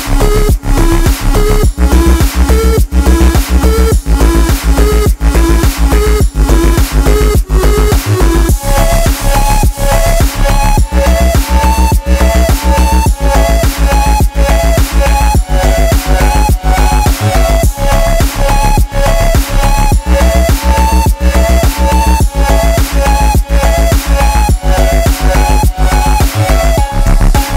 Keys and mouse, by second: 1.7 ctrl+space, 2.1 ctrl+alt+click, 2.6-6.7 ctrl+drag, 7.3 ctrl+space, 7.3 ctrl+click, 7.5 ctrl+space, 7.6 ctrl+space, 8.5-12.2 drag, 12.4-13.7 drag, 13.9 ctrl+space, 14.0 ctrl+alt+click, 14.8 ctrl+click, 15.0 ctrl+space, 15.3 click, 15.7 click, 17.4-19.6 alt+drag, 26.4 click.